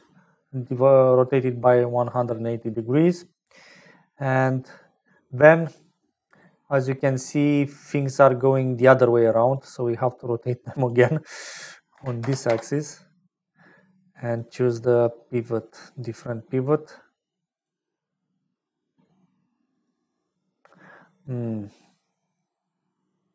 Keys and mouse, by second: 6.4 click, 9.5-11.0 drag, 11.2-13.8 drag, 14.3-15.5 drag, 19.7 click, 22.0 middle click.